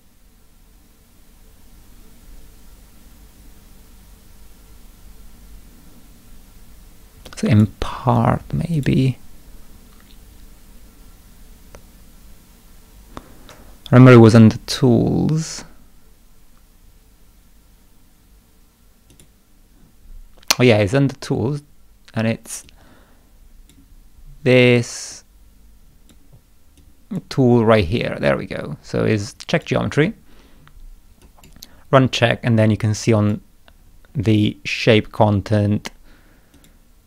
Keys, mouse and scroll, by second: 7.3 click, 8.8 click, 19.1 click, 22.7-23.7 drag, 25.1-26.1 drag, 26.8 click, 29.5 click, 31.2 click, 33.2 click, 33.8-34.3 scroll down 1, 36.6 click.